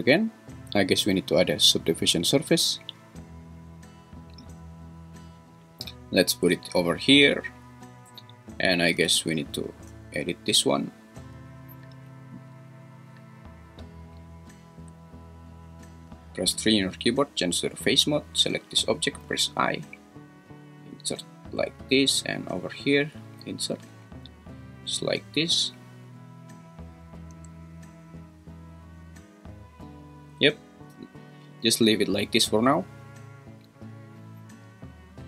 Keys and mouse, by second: 1.8-3.5 drag, 5.6-7.0 drag, 9.0 Tab, 16.6 3, 19.3 i, 23.5 i, 24.6 click, 27.3 Tab, 33.6-34.1 drag.